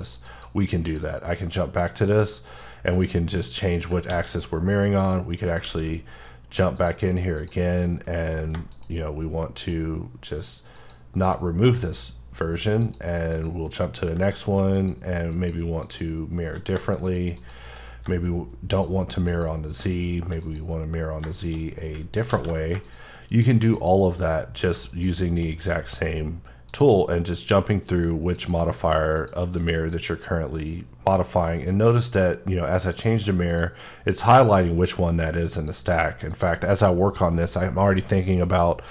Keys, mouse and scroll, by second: 0.3 click, 3.4 click, 4.1 alt+x, 5.0 click, 5.6 x, 6.8 click, 8.7 shift+click, 9.6 shift+double click, 10.3 shift+click, 10.8 shift+click, 14.8 click, 15.3 double click, 15.9 click, 16.9 click, 17.4 double click, 18.7 click, 19.3 shift+click, 22.3 alt+x, 22.8 click, 23.8 shift+click, 24.9 shift+double click, 26.7 click, 28.4 click.